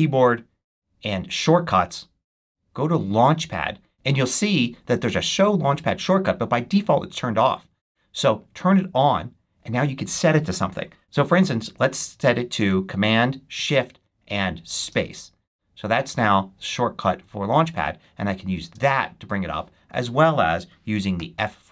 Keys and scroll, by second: 14.7 shift+super+space, 18.6 shift+super+space, 19.7 shift+super+↻.